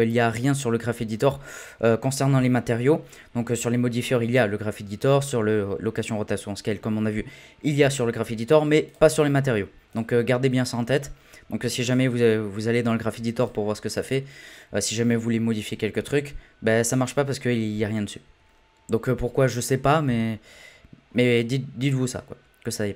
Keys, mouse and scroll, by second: 8.9-10.7 drag, 11.0-11.8 scroll up 1, 11.8-14.1 drag, 14.1-16.7 scroll down 7, 16.7 scroll up 1, 16.9-20.1 middle drag, 21.3-22.9 drag.